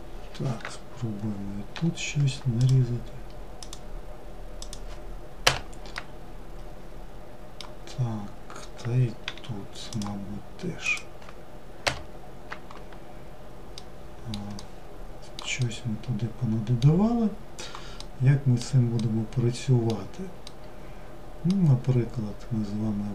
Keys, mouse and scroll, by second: 0.9 k, 5.1-8.3 middle drag, 12.9-23.1 middle drag.